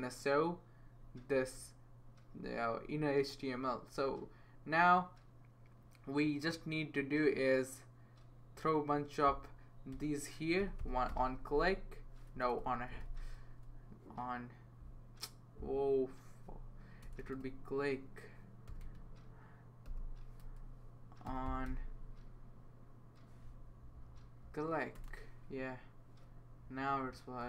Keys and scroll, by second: 9.9-12.8 typing, 17.0 BackSpace, 17.2 BackSpace, 18.7-21.7 typing, 23.6 Down, 23.8 Down, 23.9 Down, 24.1 Down, 24.4 Down, 26.6 Right, 27.0 Right.